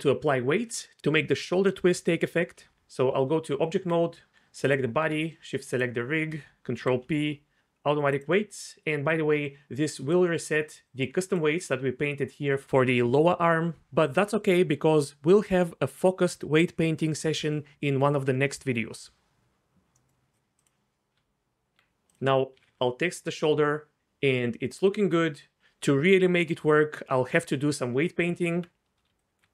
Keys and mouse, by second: 3.1 Tab, 4.6 click, 5.7 shift+click, 6.8 ctrl+p, 9.8-12.5 d, 19.9-20.6 middle drag, 20.6 click, 21.2 Tab, 22.6 r, 22.7 r, 28.2 Tab, 29.1 d.